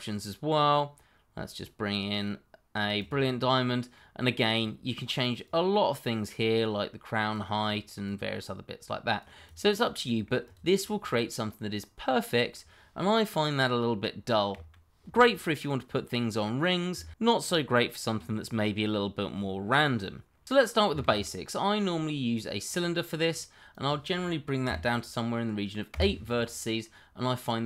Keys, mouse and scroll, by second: 2.9 click, 3.5-3.9 scroll down 1, 3.9 middle click, 4.5 scroll up 1, 5.4 click, 8.1 double click, 8.2 click, 9.8 middle click, 10.5 click, 10.7 scroll down 1, 11.0 middle click, 14.5 Delete, 21.0 shift+a, 22.6 click, 24.6 KP_8, 25.9 KP_Enter, 26.8 middle click.